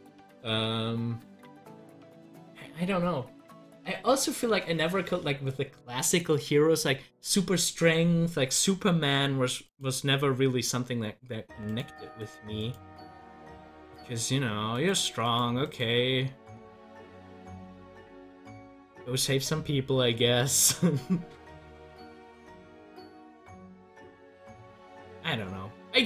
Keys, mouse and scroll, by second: 0.4-1.7 scroll up 1, 9.6 click, 20.4-26.0 drag.